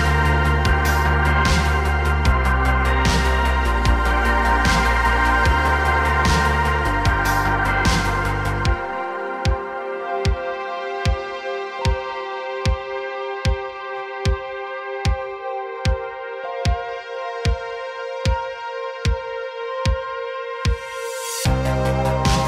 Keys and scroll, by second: 0.2 r, 5.5 i, 10.2 i, 14.6 r, 14.8 y, 15.0 y, 16.1 x, 16.2 x, 17.9 r, 18.1 z, 18.2 z, 19.9 x, 20.1 x.